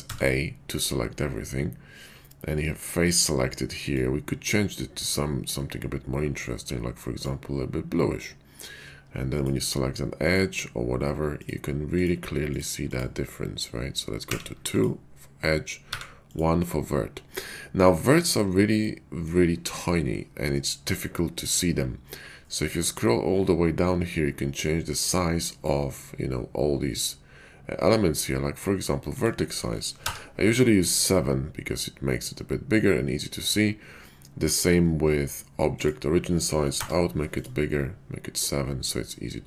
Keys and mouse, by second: 0.0 a, 10.1 click, 11.8 click, 12.4 click, 14.3 2, 14.6 click, 15.8 1, 18.8 shift+middle click, 39.1 shift+middle click.